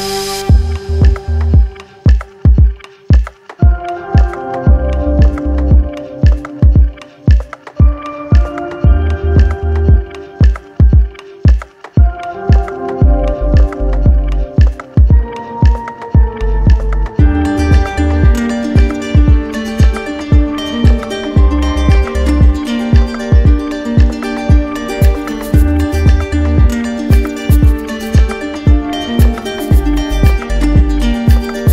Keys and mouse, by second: 3.7 click, 4.5 alt+click, 6.2 alt+click, 7.0 alt+click, 7.7 click, 9.6 click, 13.5 click, 14.7 shift+click, 17.2 click, 18.9 click, 20.1 click, 21.5 z, 22.8 click, 24.6 click, 25.4 click, 25.9 click, 26.9 click, 27.5 shift+click, 28.1 ctrl+z, 30.7 shift+click.